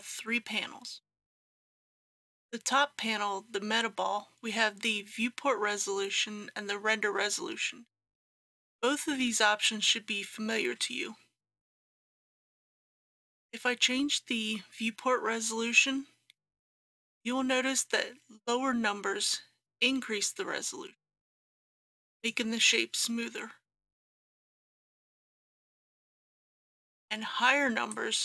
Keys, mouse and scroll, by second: 25.9 ctrl+z, 27.9-28.2 drag.